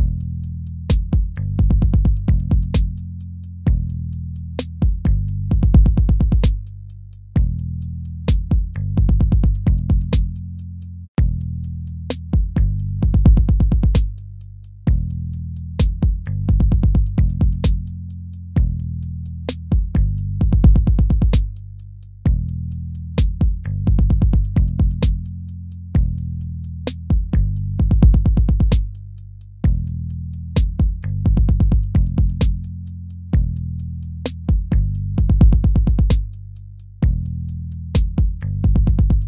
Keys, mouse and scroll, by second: 28.1 ctrl+-, 37.5 ctrl+-.